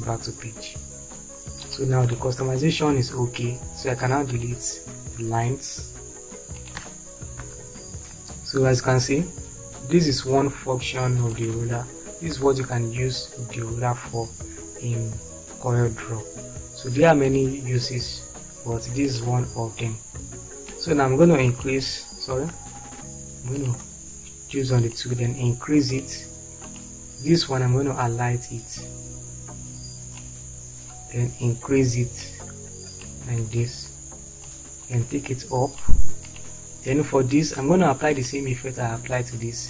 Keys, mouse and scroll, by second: 5.3 Delete, 7.3 Delete, 12.3 Delete, 22.9 ctrl+z.